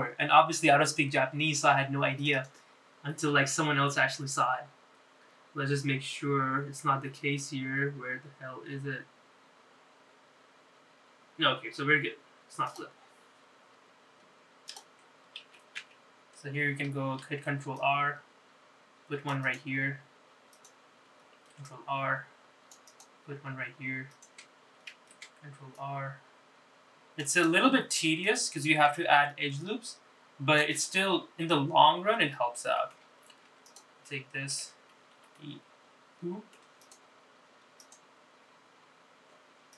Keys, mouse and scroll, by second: 15.8 click, 16.6 ctrl+z, 16.9 ctrl+z, 18.4 ctrl+r, 21.6 click, 22.5 ctrl+r, 25.2 click, 26.1 ctrl+r, 29.4 click, 30.2 ctrl+r, 32.6-34.1 middle drag, 34.6 3, 34.8 click, 35.2 middle click, 36.3 e, 39.6 click.